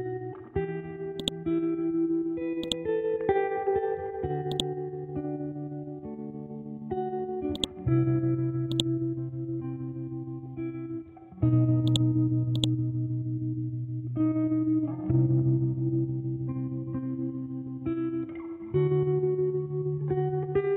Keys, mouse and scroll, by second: 1.2 click, 1.4 scroll down 1, 2.2 scroll up 1, 2.6 click, 3.4 scroll up 1, 4.5 click, 5.1 scroll down 1, 7.5-11.8 drag.